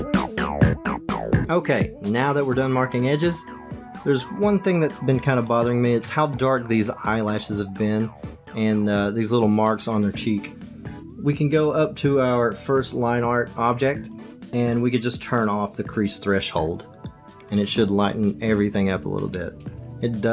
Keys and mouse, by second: 0.0-0.6 typing, 0.0 click, 0.1 Tab, 0.1 click, 0.3 Tab, 0.4 middle click, 0.5 Tab, 0.7 Tab, 0.8 shift+middle click, 1.1 ctrl+s, 14.1 click, 17.5 click.